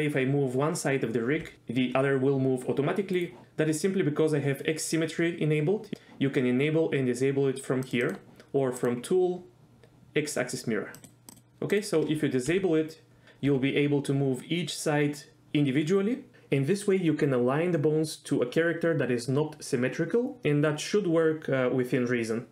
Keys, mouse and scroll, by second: 1.3 g, 3.1 right click, 7.9 click, 8.0 click, 8.8 click, 11.0 click, 11.7 click, 12.5 g, 13.5 g.